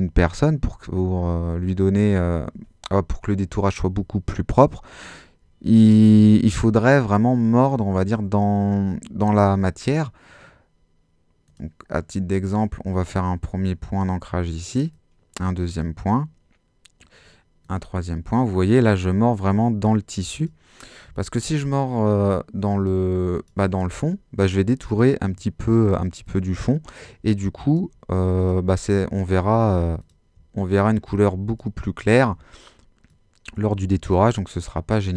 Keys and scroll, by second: 29.4 alt+super+z.